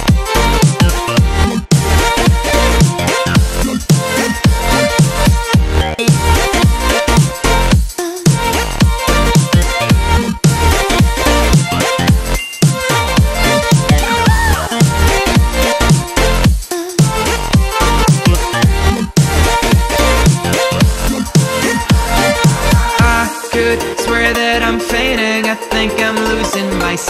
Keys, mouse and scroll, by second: 2.5 ctrl+a, 2.7 ctrl+v, 3.4-6.0 drag, 10.7 ctrl+=, 11.1 space, 11.3 click, 11.5 space, 13.7-16.5 drag, 20.1 space, 20.4 drag, 26.7-27.0 drag.